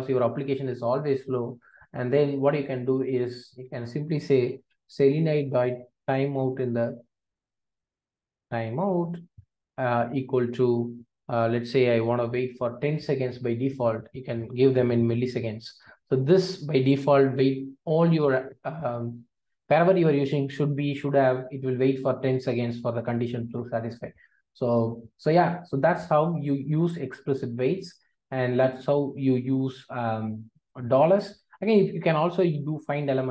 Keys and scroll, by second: 27.4 super+b.